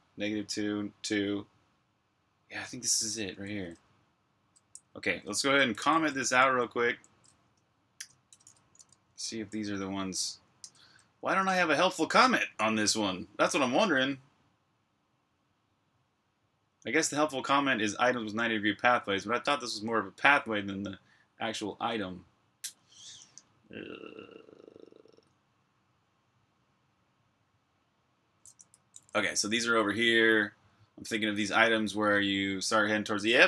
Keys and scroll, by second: 2.7-3.9 typing, 5.7 ctrl+v, 6.0-6.6 typing, 7.8-8.7 typing, 10.4-12.0 typing, 28.2-29.7 typing, 33.0-33.4 typing.